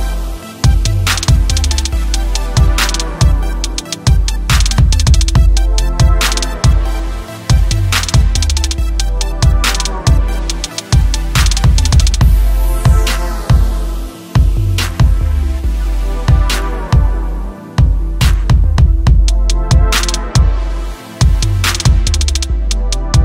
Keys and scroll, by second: 4.4 BackSpace, 7.2 ctrl+z, 13.7 shift+BackSpace.